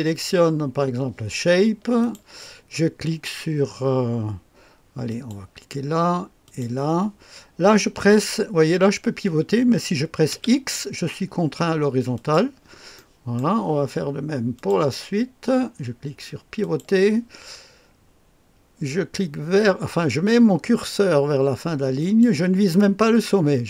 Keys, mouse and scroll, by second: 1.9 click, 5.0 click, 6.4 click, 10.3 x, 12.1 click, 12.9 right click, 14.5 click, 16.6 click, 21.9 click.